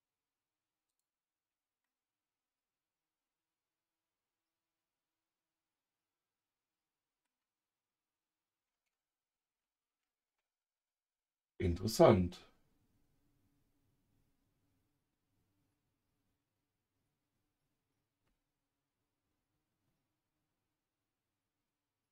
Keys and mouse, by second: 0.9 click, 1.8-7.2 middle drag, 9.5 ctrl+z.